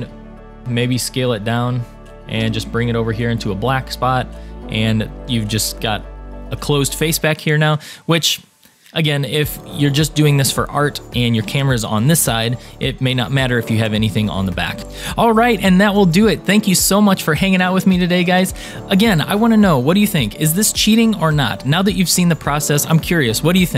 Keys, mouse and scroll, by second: 0.2-0.6 scroll up 3, 0.6 a, 0.6 s, 2.4 g, 4.5 click, 5.0 middle click, 5.3 Tab, 5.5 click, 5.9-9.8 middle drag, 10.1 middle click, 10.6 scroll down 2, 11.1 shift+middle drag, 11.6 middle click, 11.8 click, 12.5-14.4 drag, 12.5 middle click, 12.7 shift+middle click, 14.4-14.8 middle drag.